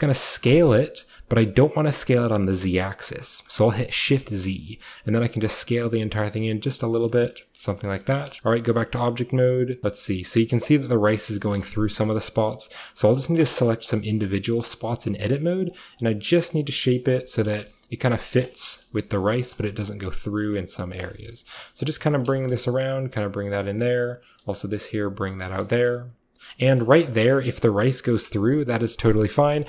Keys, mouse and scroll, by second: 0.5 s, 6.8 click, 7.1 middle click, 7.7-8.5 scroll down 2, 9.0-11.4 scroll up 2, 9.8 shift+middle click, 10.0 shift+middle click, 10.2-11.4 shift+middle drag, 11.4-12.2 scroll up 1, 11.6-13.7 middle drag, 11.8 Tab, 13.7 right click, 14.1 g, 14.7 click, 14.9 g, 15.1 scroll down 1, 15.8 scroll down 1, 16.0 click, 16.7 g, 17.0 click, 18.0 g, 18.8-21.9 scroll up 2, 19.0 g, 19.5 click, 20.3-24.3 middle drag, 20.4 g, 21.9-23.6 scroll up 1, 24.2 typing, 25.4 click, 26.5 middle click, 26.5-26.9 scroll down 1, 26.9-28.9 shift+scroll up 1, 27.1-28.9 shift+middle drag, 29.2 middle click, 29.3 scroll up 1.